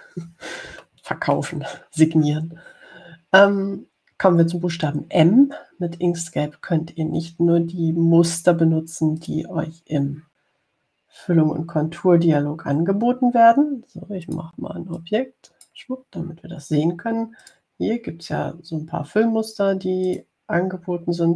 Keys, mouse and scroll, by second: 1.0-1.6 scroll down 2, 2.3 middle click, 10.5 click, 15.5 click, 16.2 click, 18.7 click, 21.3 click.